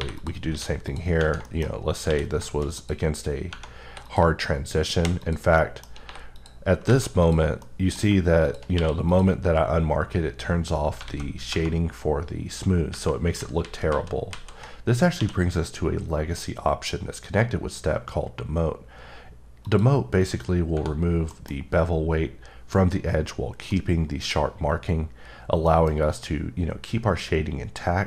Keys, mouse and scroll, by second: 0.1 click, 0.5 q, 0.9 click, 1.4 shift+middle click, 1.7-2.0 scroll up 2, 2.0 q, 2.7 click, 4.0 click, 4.4-4.9 scroll down 3, 4.9 3, 5.2 click, 5.5 middle click, 6.0 3, 6.3 click, 6.8 alt+a, 7.2 click, 7.6 middle click, 8.4 click, 9.1 click, 9.5 scroll up 1, 11.0 a, 19.6 click, 21.3 middle click, 21.5-22.0 scroll up 6, 23.7 middle click, 24.4 scroll up 1, 25.7 middle click, 25.9 scroll up 1.